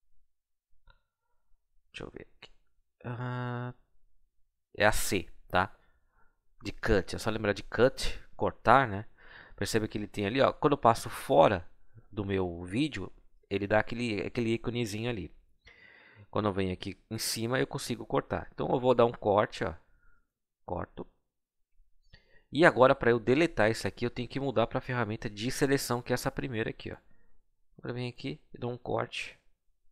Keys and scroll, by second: 1.6 r, 4.0 c.